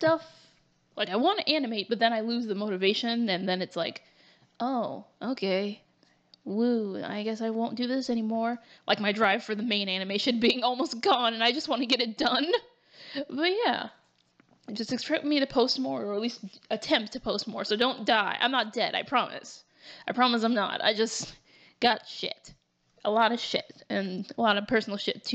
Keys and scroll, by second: 3.3 ctrl+t, 4.5 ctrl+t, 5.0 ctrl+z, 6.1 ctrl+t, 8.7 ctrl+z, 9.8 ctrl+z, 11.9 ctrl+z, 14.3 ctrl+t, 15.5 ctrl+t, 21.5 ctrl+t, 23.2 ctrl+z.